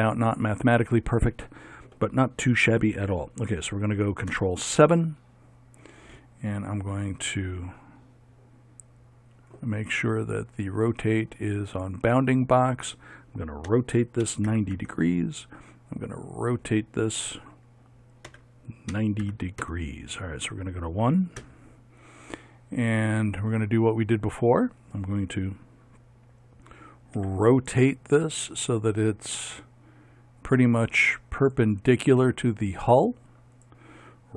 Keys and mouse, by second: 4.3 ctrl+KP_7, 4.8-7.6 middle drag, 7.8 middle click, 8.0-10.1 middle drag, 10.9 click, 13.3 middle click, 13.7 r, 16.2 right click, 17.1 right click, 17.7 click, 18.3 r, 21.4 KP_1, 27.2 r.